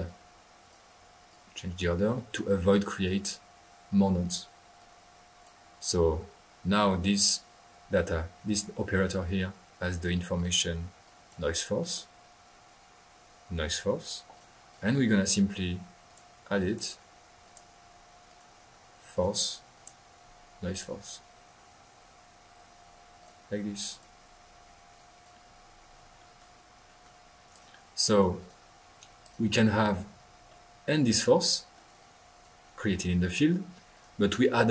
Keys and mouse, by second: 1.2-2.6 drag, 3.0-3.5 drag, 3.8-4.5 drag, 4.7 click, 6.4 middle click, 10.3 click, 11.0-11.4 drag, 14.3-15.6 drag, 16.0 drag, 16.6-17.0 drag, 17.4 click, 18.2 click, 19.1 click, 19.7 click, 20.7 click, 23.2 click, 23.9-24.3 drag, 24.9-25.5 drag, 26.1-26.7 middle drag, 26.8 middle click, 27.5 click, 28.1-28.6 drag, 29.2 drag, 30.4 middle click, 31.9 click, 33.9-34.3 drag.